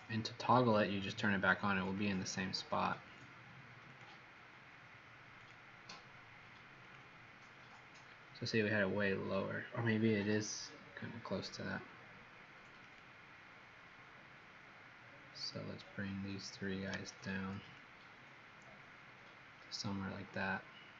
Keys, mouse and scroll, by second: 17.0 shift+click, 17.7 click.